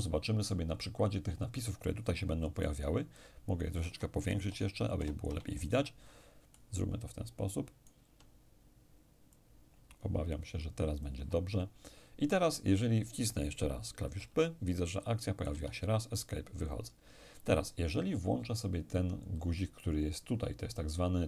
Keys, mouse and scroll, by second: 2.6-4.7 alt+right drag, 4.4 ctrl+alt+shift+=, 4.9 ctrl+alt+shift+=, 6.5-8.8 alt+right drag, 9.3-12.0 drag, 14.1 p, 15.5 Escape.